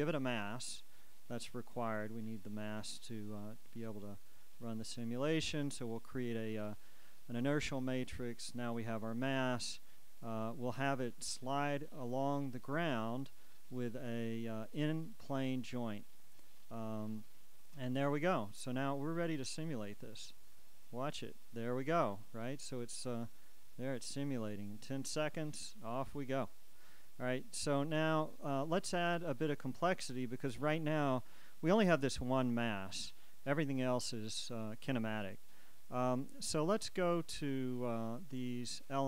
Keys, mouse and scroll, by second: 0.6 click, 1.8 click, 4.1 click, 5.3 click, 6.6 click, 7.9 click, 10.4 shift+right click, 12.4 click, 16.1 click, 17.4 click, 19.1 click, 20.2 click, 23.2 click, 26.2 click.